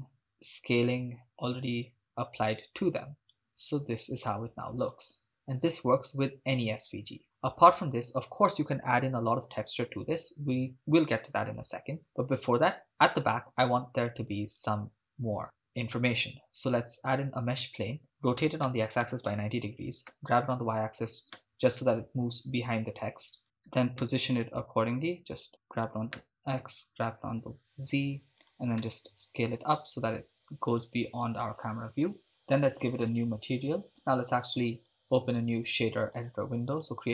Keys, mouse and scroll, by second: 1.3-3.3 drag, 5.3 shift+space, 7.2 shift+space, 14.6 click, 15.4 shift+a, 18.4 r, 18.6 x, 18.9 9, 19.0 0, 19.3 Return, 20.1 g, 21.3 y, 23.7 g, 24.0 x, 25.7 click, 26.1 g, 26.6 z, 28.4 click, 28.9 s, 30.7 click, 32.8 click, 33.6-33.9 drag, 34.9-36.3 drag, 36.7-37.1 drag.